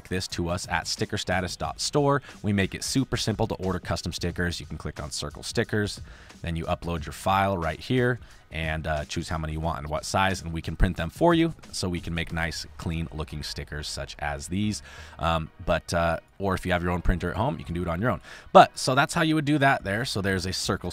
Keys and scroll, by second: 16.8 space, 18.2 space, 19.0 space.